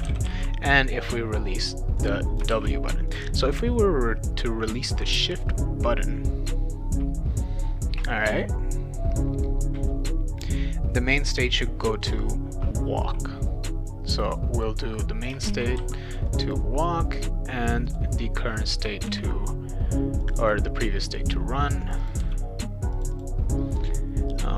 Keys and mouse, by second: 0.0-0.8 typing, 2.0 click, 2.5 shift+w, 3.1 click, 14.3 click, 14.6 click, 15.5 shift+w, 15.8 a, 16.3 click, 16.5 click, 17.6 click, 17.8 click, 19.1 shift+r, 20.2 click, 20.4 click, 21.8 click, 22.0 click, 22.2 r, 22.9 click, 23.1 click.